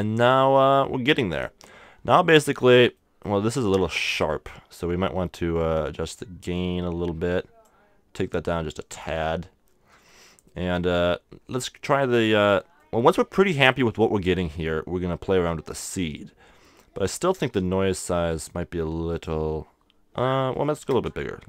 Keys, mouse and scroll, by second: 0.8-2.7 middle drag, 3.0-5.6 middle drag, 5.6-7.4 drag, 8.9-10.7 drag, 9.9 right click, 10.7-11.7 middle drag, 12.8-15.4 middle drag, 16.9-18.8 drag, 18.3-20.1 middle drag, 19.1-21.2 drag.